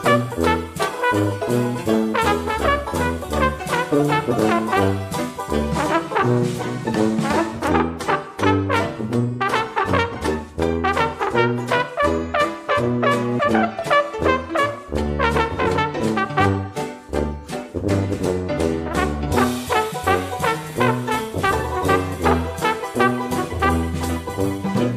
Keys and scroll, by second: 8.9 ctrl+g, 18.2 ctrl+g.